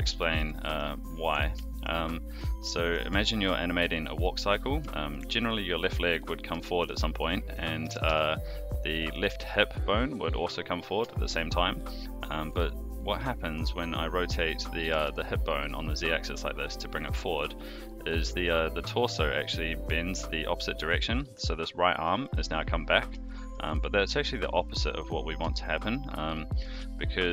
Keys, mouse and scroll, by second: 0.2 shift+middle drag, 0.6 middle click, 1.1 click, 1.5 shift+middle drag, 2.1-2.9 middle drag, 3.2-3.5 shift+middle drag, 3.8-4.2 middle drag, 4.9 shift+middle drag, 6.5 shift+middle drag, 7.2-7.5 middle drag, 7.8 r, 11.0-11.8 shift+middle drag, 14.8 r, 20.2-20.7 middle drag, 22.0-22.4 middle drag, 23.2 shift+middle drag, 23.7-24.4 middle drag, 25.5-25.9 shift+middle drag, 25.9 scroll down 1, 26.3 middle click, 26.8-27.2 shift+middle drag.